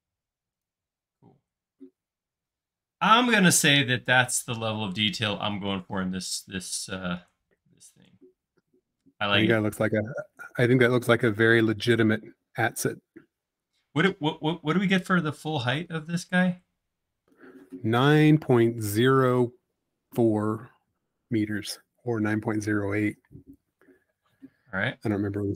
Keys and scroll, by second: 10.0 e, 15.4 l, 22.8 space.